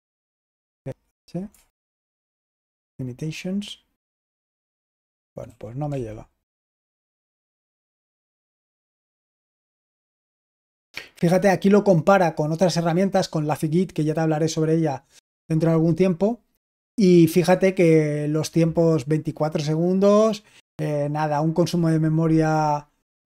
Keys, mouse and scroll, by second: 0.5 typing, 1.6 typing, 4.7-5.8 typing.